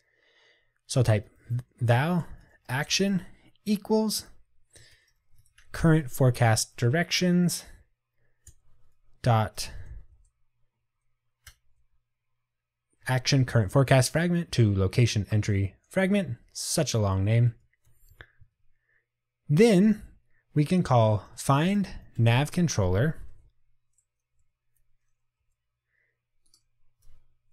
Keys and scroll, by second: 6.5 Return, 11.6 Return, 18.2 Tab, 22.2 Tab, 22.3 Return.